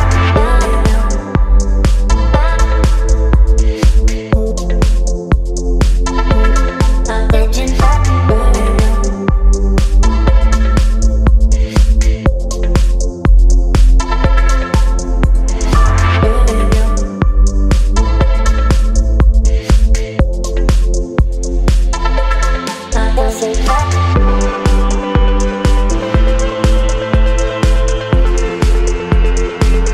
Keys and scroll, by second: 1.3 space, 4.3 space, 6.9 space, 9.9 space, 12.4 space, 21.0 v.